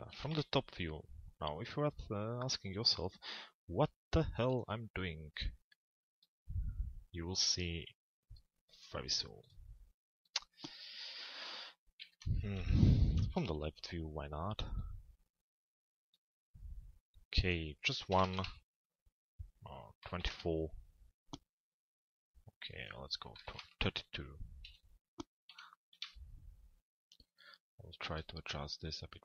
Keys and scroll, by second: 0.3 z, 11.7 l, 12.6 z, 24.2 p, 25.5 z.